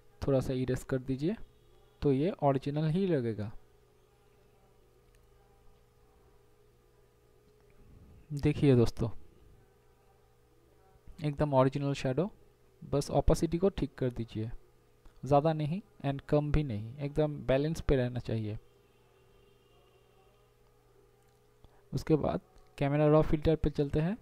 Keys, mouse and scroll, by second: 1.6 ], 5.6 ], 6.5 ], 7.1 ], 9.5 ctrl+0, 20.0 ctrl+shift+a.